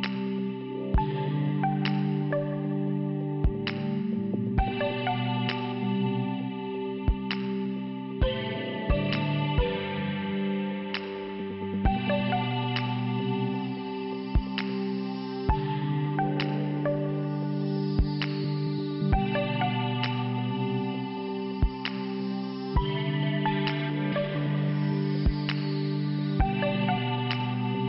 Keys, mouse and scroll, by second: 0.0 click, 0.9 click, 3.1-4.3 scroll down 2, 4.3 5, 4.9 f, 5.0 f, 6.9 click, 7.0 click, 7.8 click, 8.0 click, 8.7 click, 8.8 click, 9.9 click, 11.1 click, 11.2 click, 11.6 click, 11.8 click, 13.4 scroll up 1, 14.8 scroll up 1, 16.9 click, 17.2 click, 17.5 click, 17.9 click, 18.2 click, 18.4 click, 18.6 click, 18.8 click, 19.5 right click, 19.6 click, 19.8 right click, 22.6 middle click, 24.9 click, 25.2 click, 25.2 click, 25.3 click, 25.4 click.